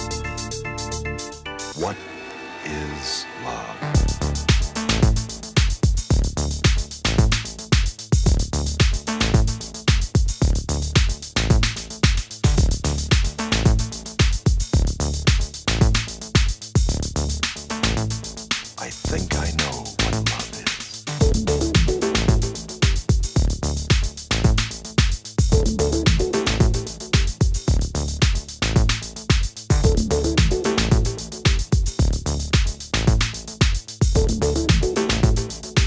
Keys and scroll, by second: 22.8 super+z.